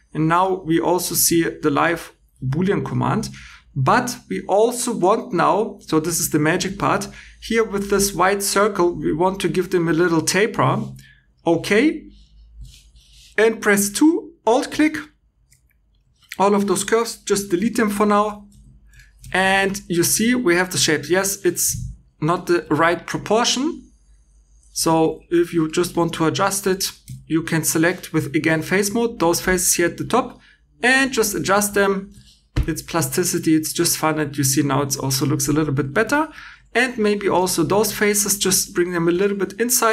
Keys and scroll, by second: 15.3 2, 17.2 c, 18.4 x, 19.3 shift+e, 22.5 3, 24.7 Escape, 36.4 3.